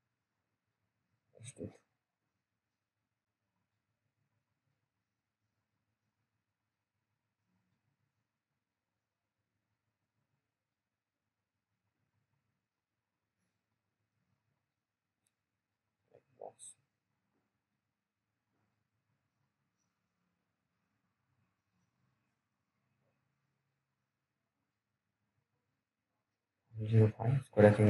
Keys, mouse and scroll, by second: 0.0 click, 0.0 click, 7.4 right click, 8.1 click, 9.5 ctrl+s, 10.4 click, 10.5 click, 11.1 t, 11.6 scroll down 1, 11.9 click, 13.8 scroll down 1, 14.0 middle click, 14.3-15.1 scroll up 1, 15.1 click, 15.8 scroll down 1, 17.0-20.3 scroll up 1, 20.3 scroll up 1, 20.4 click.